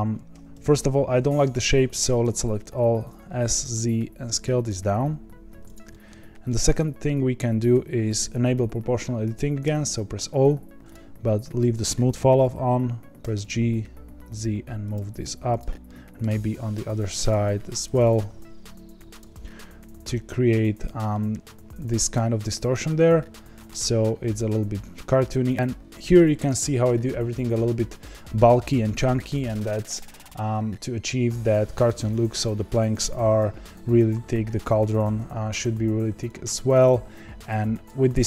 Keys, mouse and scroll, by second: 0.3 1, 0.9 a, 1.2-2.8 middle drag, 2.8 s, 5.9-9.6 middle drag, 9.6 o, 10.9 click, 13.2 g, 15.6 click, 15.8 middle click, 16.5 g, 17.9 click, 18.2 g, 19.3-29.6 middle drag, 29.6-31.6 scroll down 1, 31.6-35.0 scroll down 1, 35.0 Tab, 36.4-38.2 shift+drag.